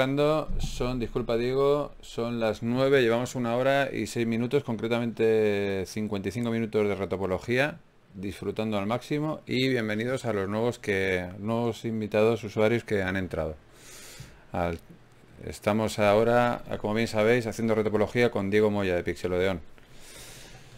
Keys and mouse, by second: 3.4 f, 5.8-7.0 right drag, 6.6 f, 7.0-9.1 drag, 7.7 middle click, 7.7 right click, 9.3 middle click, 10.1-11.2 right drag, 11.2 f, 16.7 ctrl+r, 19.5 ctrl+z, 20.1 right click.